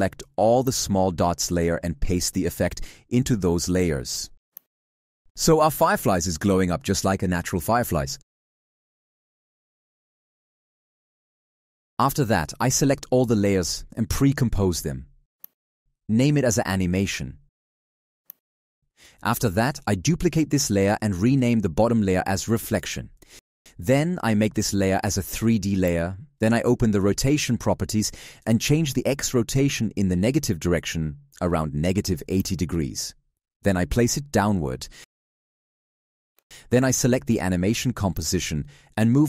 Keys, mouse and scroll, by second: 0.4 shift+click, 2.8 ctrl+v, 19.9 ctrl+d.